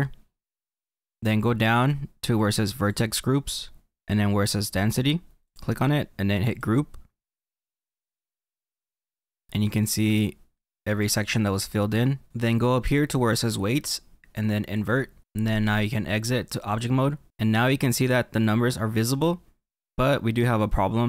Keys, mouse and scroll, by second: 8.8 middle click, 15.2 click, 17.2 click, 17.5-19.0 middle drag, 19.8-21.0 middle drag.